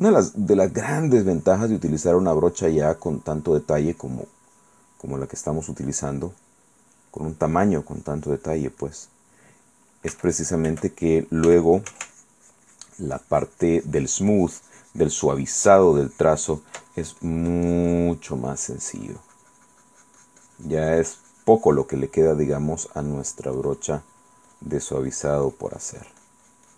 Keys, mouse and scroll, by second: 0.9 click, 1.6-3.9 drag, 4.1 click, 5.5 click, 6.2 click, 6.2 right click, 7.1 click, 7.1 right click, 7.8 click, 9.0 click, 9.0 right click, 10.3 f, 10.6 click, 11.7 f, 11.9 ctrl+click, 12.3-17.0 ctrl+drag, 17.1-18.8 ctrl+drag, 19.2-22.2 drag, 22.3-23.6 drag, 23.8-26.7 drag.